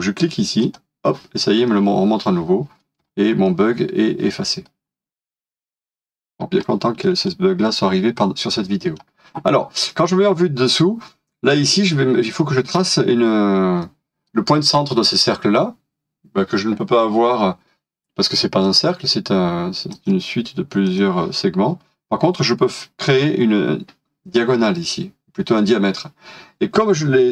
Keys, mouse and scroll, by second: 2.8 scroll down 1, 3.4 middle click, 3.6 scroll down 1, 5.3 middle click, 6.1 scroll up 1, 6.6 shift+middle click, 7.2-8.6 scroll up 1, 8.7 middle click.